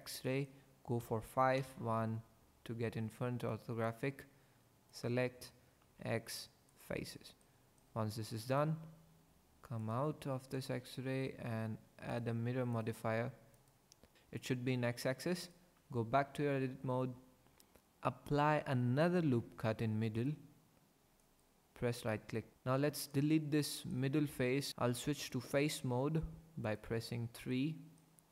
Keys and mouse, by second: 1.0 KP_5, 1.6 KP_1, 3.4 click, 5.8 x, 7.4 click, 8.0 Tab, 8.5 click, 10.6 click, 12.2-13.7 drag, 15.8 Tab, 19.2 ctrl+r, 20.2 click, 21.2 click, 22.5 ctrl+z, 23.1 click, 24.7 ctrl+z, 24.7 3, 25.4 click, 25.8 3, 26.7 click.